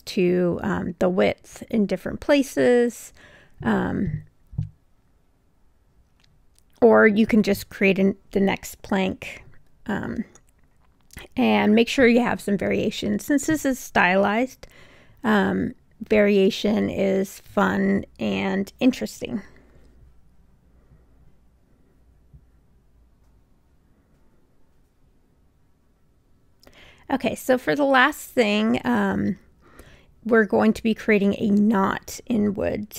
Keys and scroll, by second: 4.0 b.